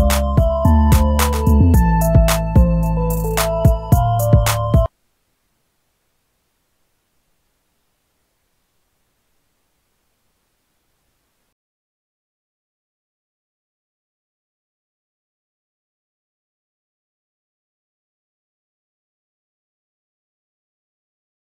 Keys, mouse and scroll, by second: 0.5-8.9 typing.